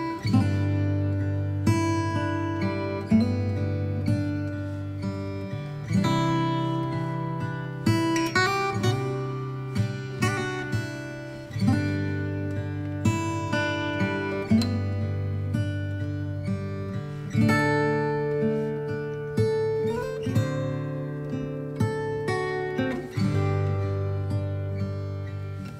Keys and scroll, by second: 1.7 ctrl+d, 2.1 v, 2.6 space, 6.2 space, 11.1 b, 11.9 v, 16.4 Up, 18.8 b, 20.5 space, 21.5 space, 22.9 ctrl+j, 23.6 ctrl+t.